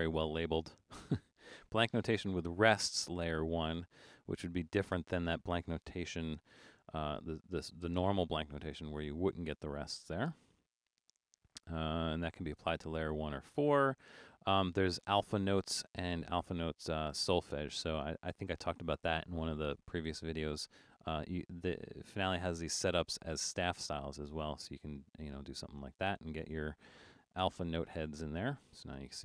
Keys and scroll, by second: 6.0 BackSpace, 10.4 BackSpace, 27.5 super+=, 27.9 super+=.